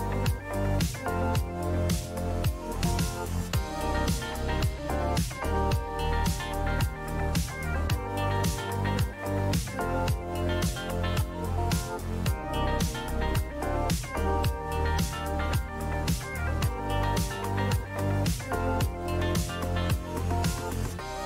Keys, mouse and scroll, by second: 6.3 click, 7.3 click, 11.2 click, 17.1 click, 17.8 click, 18.1 click, 19.5 click, 19.9 click, 20.5 click, 21.1 click.